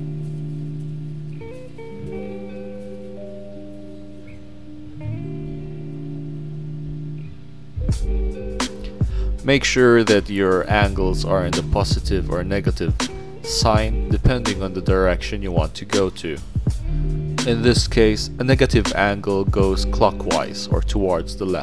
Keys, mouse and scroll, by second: 0.6 click, 1.5 click, 1.9 click, 5.7-7.5 drag, 8.9 scroll up 2, 9.5-10.7 drag, 11.2 click, 14.6-16.1 scroll down 1, 16.1-17.2 scroll down 1, 21.4 scroll up 1.